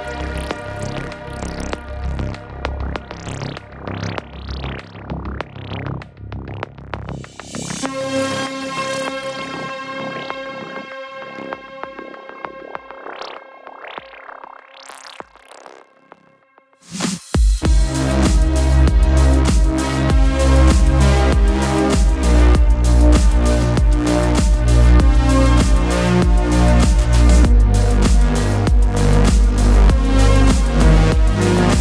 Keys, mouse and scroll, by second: 0.2-0.8 scroll up 2, 0.8-3.4 middle drag, 3.4 alt+a, 4.2 click, 5.1 scroll down 1, 5.4-6.4 shift+middle drag, 6.4 3, 6.6 click, 7.7 click, 8.2-9.2 scroll down 2, 9.2-10.8 middle drag, 10.8 /, 11.5 middle click, 12.0 Tab, 12.2 click, 13.8-14.1 scroll down 3, 14.1-14.5 middle drag, 14.5 Tab, 15.0 middle click, 15.4 alt+a, 15.6-18.3 middle drag, 18.3-18.7 scroll up 2, 18.7-20.4 middle drag, 20.4-20.9 drag, 20.9-22.4 middle drag, 22.4-24.7 drag, 24.7-26.8 middle drag, 26.8-27.3 drag, 27.3-29.7 middle drag, 29.7-30.1 scroll up 2, 30.5 alt+click, 30.9 alt+shift+click, 31.7 alt+shift+click.